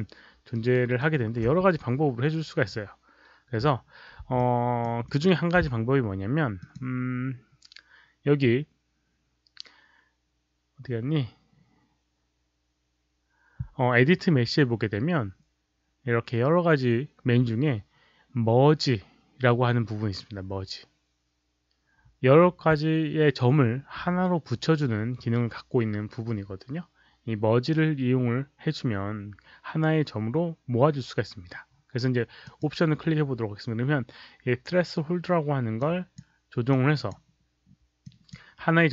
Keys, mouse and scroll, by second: 0.4 alt+right click, 0.6 alt+click, 0.9 alt+middle click, 4.3-4.7 alt+drag, 5.0 alt+middle click, 6.5 click, 32.3 click, 35.7-36.1 drag, 36.6 click, 37.9 drag.